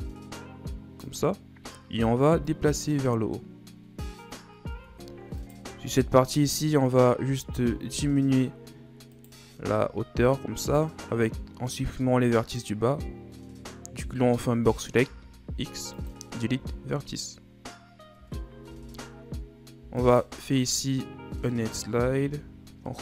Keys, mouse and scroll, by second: 2.4-4.7 drag, 4.7 Tab, 5.4 right click, 6.0-7.3 shift+scroll up 6, 7.3 Tab, 7.9 z, 9.1 right click, 9.5 b, 15.0 x, 18.1 Tab, 18.6 Tab, 20.0 alt+right click, 20.8-22.2 middle drag, 22.2 ctrl+e.